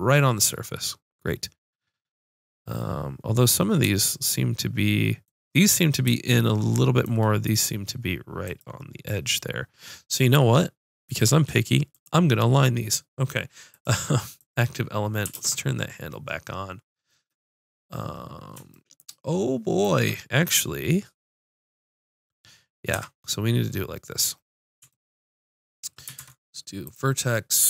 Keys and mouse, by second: 8.5-10.3 drag, 13.7-15.4 drag, 15.4 ctrl+space, 21.6-23.7 drag, 23.0 Tab, 23.9 middle click, 26.2 ctrl+Tab.